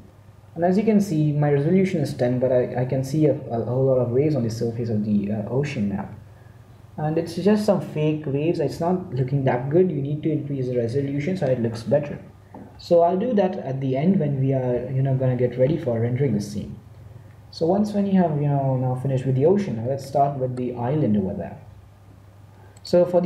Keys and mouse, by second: 2.4 middle click, 17.9-20.0 middle drag, 19.4 z, 19.6 z, 20.1 middle click.